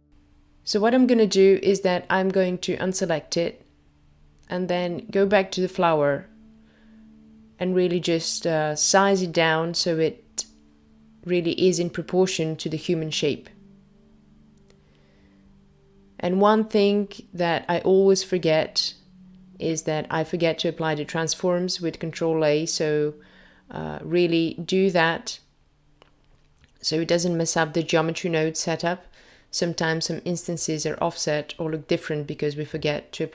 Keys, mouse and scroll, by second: 8.4 middle click, 9.4-10.2 scroll down 3, 10.5 click, 12.8 s, 18.5 click, 20.0 click, 22.8 click, 32.0 click.